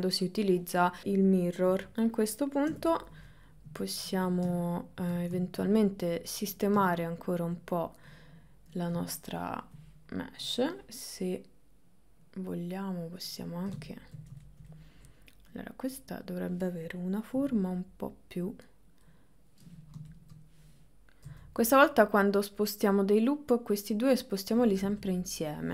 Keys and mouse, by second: 1.0 middle click, 1.7 KP_1, 1.9 KP_1, 1.9 KP_3, 2.8 KP_9, 4.0 ctrl+middle click, 5.4 ctrl+middle click, 9.1 ctrl+middle click, 12.3 click, 13.3 click, 14.0 shift+middle click, 14.6 middle click, 15.6 click, 17.4 g, 19.8 click, 21.3 g.